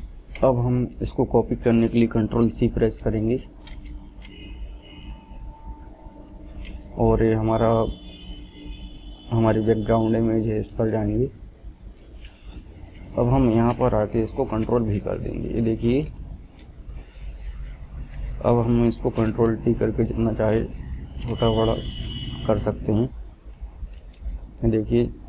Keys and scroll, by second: 2.3 ctrl+c, 13.4 ctrl+v, 19.8 ctrl+t.